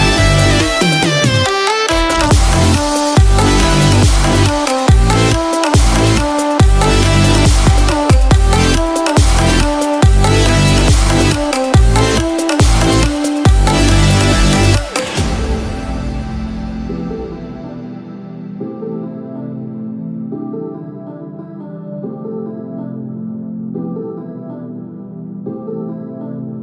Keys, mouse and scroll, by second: 0.0 shift+middle click, 0.9 middle click, 2.0 shift+middle click, 6.5 click, 19.2 middle click, 23.4 shift+middle click.